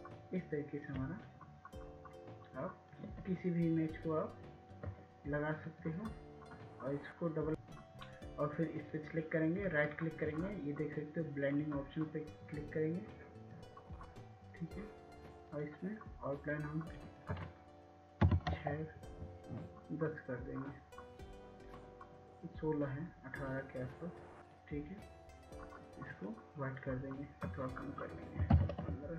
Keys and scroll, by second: 19.9 Tab, 23.5 typing.